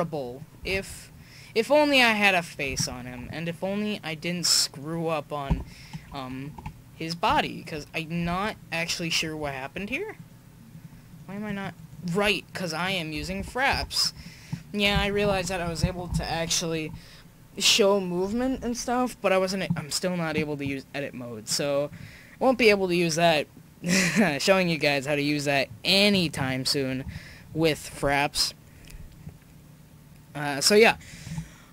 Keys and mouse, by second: 0.9 shift+z, 2.8 shift+z, 3.3 middle click, 4.1-5.5 middle drag, 5.5 Tab, 13.2 Tab, 13.4 Tab, 13.7 Tab.